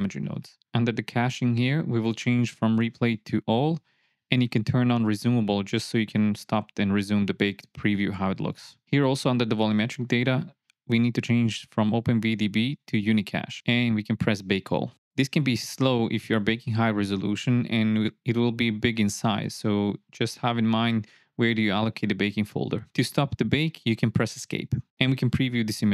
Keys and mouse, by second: 4.8-6.4 drag, 9.6 click, 11.0-12.0 drag, 15.7-24.8 drag, 25.4 drag.